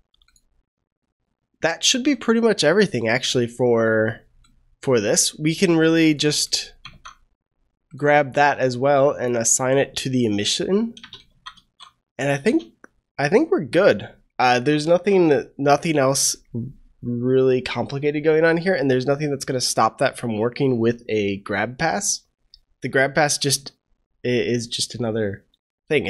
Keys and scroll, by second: 6.9 ctrl+c, 11.2 ctrl+v, 11.5 ctrl+s, 14.7 ctrl+s.